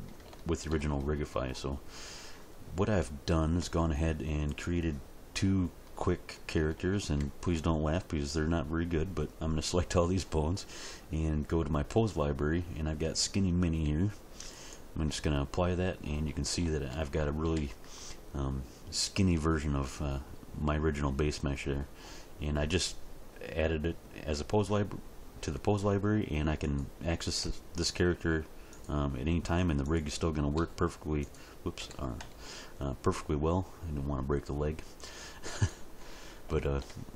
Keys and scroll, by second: 27.4 r, 30.6 r, 31.8 r, 32.2 x.